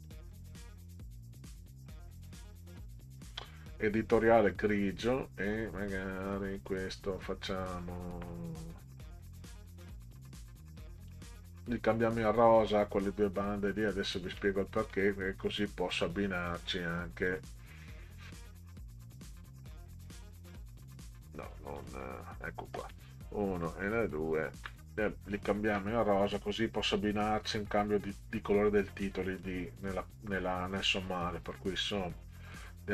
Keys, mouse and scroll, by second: 0.1 click, 2.2 click, 6.5 click, 11.1 click, 12.4 click, 14.9 click, 16.5 click, 17.3 click, 18.4 click, 20.0 click, 20.8 click, 21.8 click, 23.5 shift+click, 27.1 click, 29.0-29.4 drag, 31.0 click, 32.5 click.